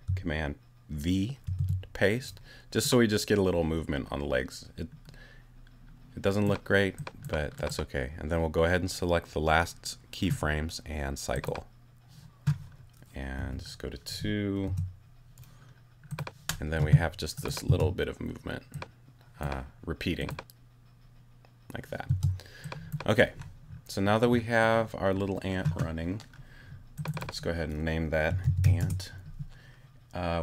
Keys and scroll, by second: 1.4 super+v, 13.4 2, 14.7 Return, 17.7 space, 22.1 space, 28.0-29.1 typing.